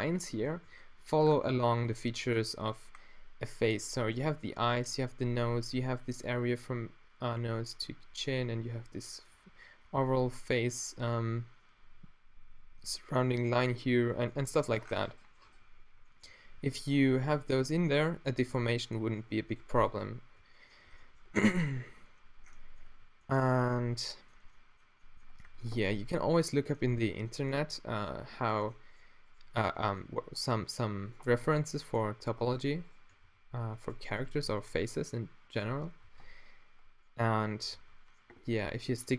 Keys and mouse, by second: 0.0-1.4 drag, 14.1-19.9 middle drag, 20.9 a, 21.6-24.0 middle drag, 26.4-27.6 middle drag, 30.0 e, 31.1 middle click, 31.5 g, 31.8-32.5 drag, 33.2 f, 34.4 f, 35.5-36.1 middle drag, 36.1 t, 37.8 Tab.